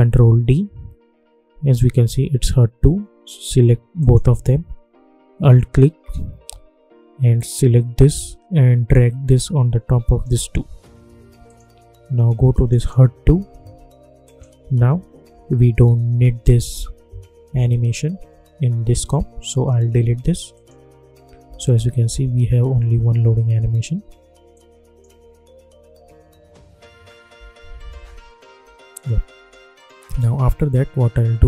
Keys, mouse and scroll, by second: 0.2 ctrl+d, 3.9 shift+click, 7.3-11.4 alt+drag, 11.4 click, 15.5-16.3 alt+scroll up 1, 20.5 click, 21.4 space, 24.4 click, 25.0 space, 27.3 space, 28.8-31.4 drag.